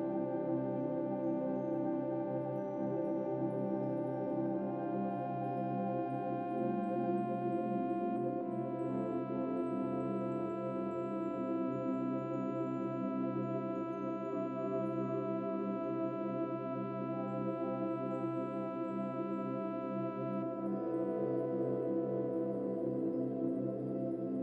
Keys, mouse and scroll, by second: 3.4 click, 5.7-7.7 shift+drag, 11.5 click, 17.5 ctrl+s, 18.6 click, 24.2 click.